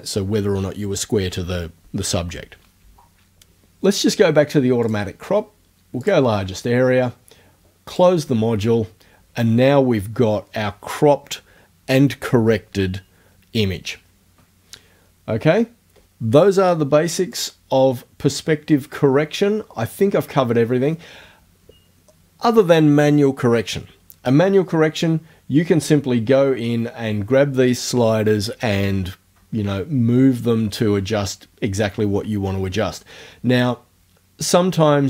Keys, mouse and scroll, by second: 4.8 click, 6.0 click, 7.9 click, 17.4 click.